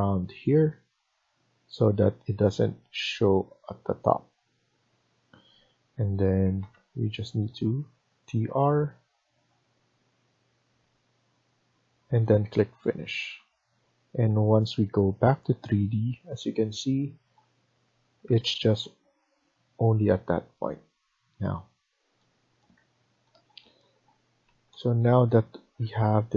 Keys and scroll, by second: 4.6 Escape, 4.9 Escape, 5.0 Escape, 6.3 typing, 13.0 Escape, 13.2 Escape, 18.1 Escape, 24.3 Escape.